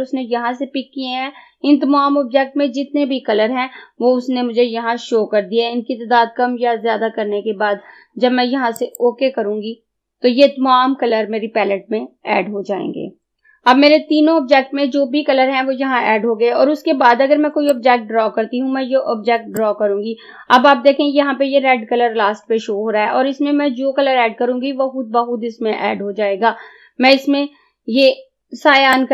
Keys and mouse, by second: 13.3 click, 17.7-29.0 drag.